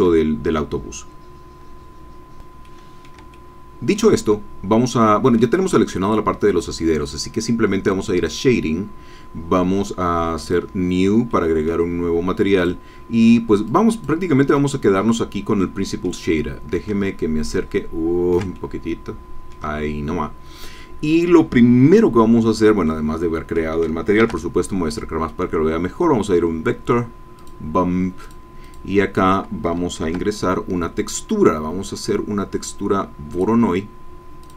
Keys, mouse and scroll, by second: 0.5-2.6 middle drag, 2.6 click, 3.2 shift+middle click, 3.3 shift+click, 5.0 click, 5.6-6.9 middle drag, 10.4 click, 11.2 click, 11.9 scroll down 1, 12.5 click, 13.7 click, 14.6 click, 15.6 middle click, 16.4 middle click, 16.9 ctrl+click, 17.1-18.5 ctrl+drag, 18.5-19.7 ctrl+shift+drag, 22.2-22.8 scroll up 4, 22.8 click, 24.2 shift+a, 27.3 click, 28.2 click, 30.0 shift+a, 33.3 click, 34.4-34.5 drag.